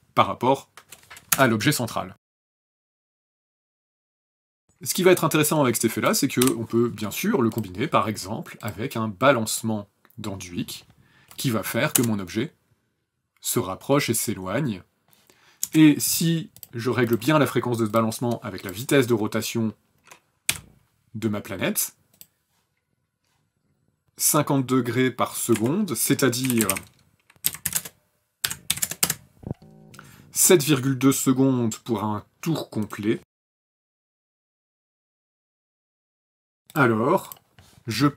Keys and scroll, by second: 1.3 KP_0, 4.7 u, 6.4 Delete, 11.9 KP_0, 15.6 KP_0, 20.5 r, 26.2-28.7 typing, 28.5 KP_Divide, 29.0 KP_Enter, 34.0-35.5 typing, 34.9 KP_Enter.